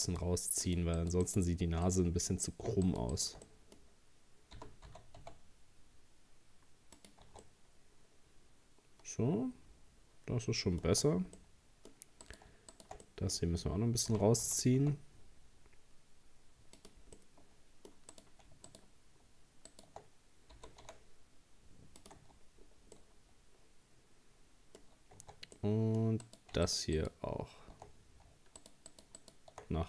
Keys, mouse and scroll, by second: 0.1 shift+right click, 0.7 shift+right click, 1.0 shift+right click, 1.3 shift+right click, 1.9-2.9 middle drag, 2.9 shift+right click, 3.1 shift+right click, 3.5-4.6 middle drag, 4.6 g, 7.3 Tab, 7.4-10.5 middle drag, 10.9 Tab, 11.4 middle click, 12.3 right click, 12.7 shift+right click, 13.1-14.1 middle drag, 14.1 g, 17.2 middle click, 18.1 right click, 18.7 shift+right click, 19.7 shift+right click, 20.6 g, 22.2 Tab, 22.6-23.0 scroll down 1, 23.0-24.8 middle drag, 24.8-25.2 scroll up 3, 25.2 Tab, 25.6 middle click, 26.2 right click, 26.7 shift+right click, 27.0 shift+right click, 28.6 shift+right click, 28.9 shift+right click, 29.2 shift+right click.